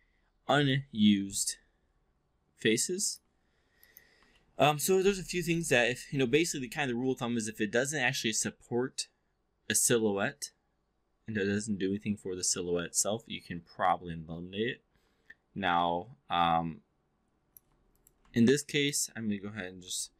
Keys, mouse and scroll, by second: 0.6-3.2 alt+drag, 2.6 alt+s, 3.8 click, 4.4 alt+middle click, 5.3 click, 6.6-17.6 alt+drag, 17.8 click, 18.4-18.9 alt+drag, 19.8 shift+i.